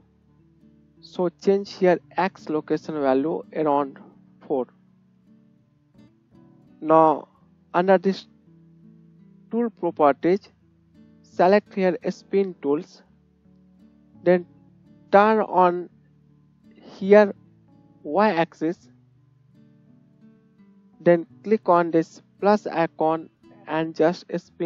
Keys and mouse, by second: 9.1-18.7 drag, 9.1-18.7 middle drag, 9.1-19.9 right drag, 19.9 shift+middle click, 20.6 right click, 21.1-24.6 drag, 22.9-24.6 middle drag, 22.9-24.6 right drag.